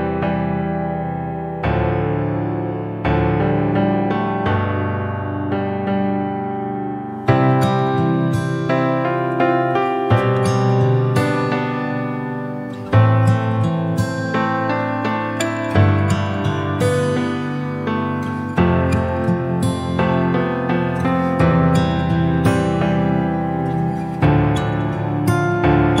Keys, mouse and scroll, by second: 0.6 KP_Decimal, 1.5-2.6 middle drag, 2.6 /, 3.6 KP_Decimal, 4.9 ctrl+r, 6.6 ctrl+r, 9.8 middle click, 10.6 click, 11.1 scroll down 1, 12.1 ctrl+r, 13.6-13.9 scroll down 2, 13.9 middle click, 14.4-14.8 scroll down 4, 14.8-15.7 scroll up 2, 15.7 ctrl+r, 18.6 KP_Decimal, 19.3-19.7 scroll down 1, 19.9 scroll down 2, 20.2 g, 22.2 click, 23.8 Tab, 24.0 scroll down 3, 24.2-25.6 middle drag, 25.6-26.0 scroll down 1.